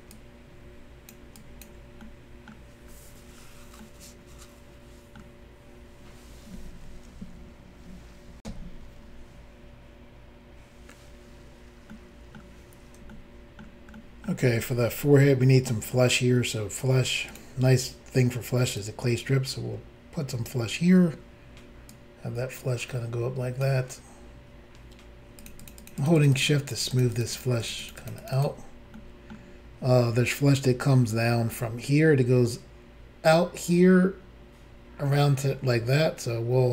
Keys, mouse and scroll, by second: 0.1 ctrl+click, 1.4 ctrl+click, 2.0 middle click, 2.8-3.4 scroll down 4, 3.8 middle click, 8.4 Insert, 11.9 middle click, 13.1 shift+middle click, 14.0 middle click, 14.6 shift+middle click, 14.7 shift+scroll up 1, 17.3 click, 17.4 click, 18.8 click, 21.9 click, 25.4 shift+click, 25.5 shift+click, 25.6 shift+click, 25.7 shift+double click, 25.8 shift+click, 25.9 shift+click, 26.0 shift+click, 26.1 shift+double click, 26.2 shift+click, 26.2 shift+click, 26.3 shift+click, 26.4 shift+double click, 26.7 shift+click, 26.8 shift+click, 26.9 shift+click, 27.0 shift+double click, 27.1 shift+click, 27.2 shift+click, 27.3 shift+click, 27.4 shift+double click, 27.6 shift+click, 27.7 shift+click, 27.8 shift+click, 27.9 shift+double click, 28.0 shift+click, 28.1 shift+click, 28.2 shift+click, 28.3 shift+double click, 28.3 shift+click, 28.4 shift+click, 28.9 middle click.